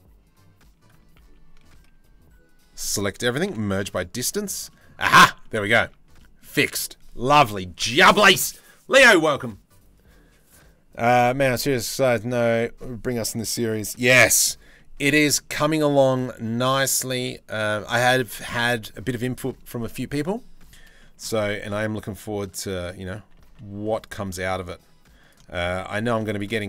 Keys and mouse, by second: 1.3 ctrl+z, 2.2 a, 3.1 m, 4.5 middle click, 5.5 Tab, 5.8 middle click, 13.6-14.0 middle drag, 14.4 middle click, 14.9 shift+middle drag, 15.2 middle click, 15.7-16.2 shift+middle drag, 16.5 middle drag, 17.4 Tab, 17.8 middle click, 18.2 Tab, 18.5 Tab, 21.4 ctrl+r, 23.2 ctrl+r, 25.1 shift+middle click, 25.7 1, 25.9 click, 26.2 shift+middle click.